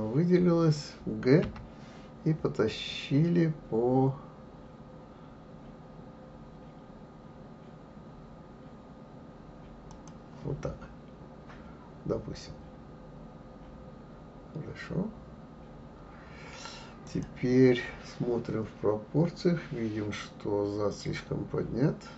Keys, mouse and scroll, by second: 1.4 g, 17.0 click.